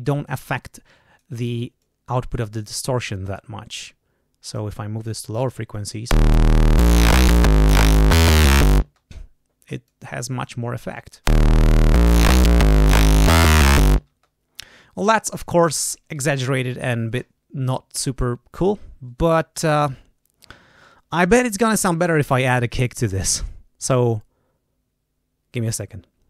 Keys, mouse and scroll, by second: 0.3-1.3 drag, 1.7-2.7 drag, 3.7 click, 5.0 click, 5.6 click, 6.0 space, 8.8 space, 9.8 click, 10.9 click, 11.2 space, 14.0 space.